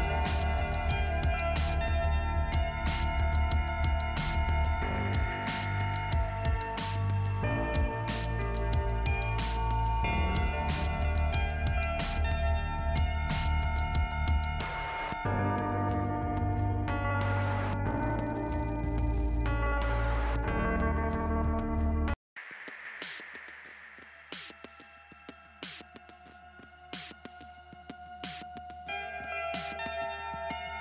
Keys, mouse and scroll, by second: 2.0 click, 3.2 Delete, 3.3 click, 3.4 Delete, 6.0 click, 7.2 click, 8.2 click, 9.3 scroll down 1, 12.6 click, 12.6 click, 13.6 click, 13.7 click, 15.2 click, 15.3 click, 20.2 click, 22.6 click, 24.3 click, 26.3 click, 29.1 scroll up 3, 30.2 scroll up 1.